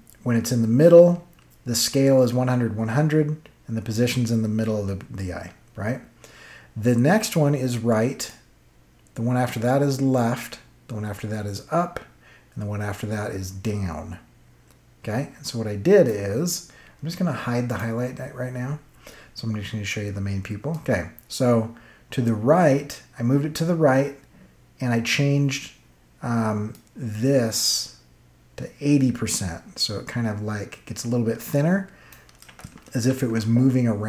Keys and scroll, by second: 32.9 ctrl+z.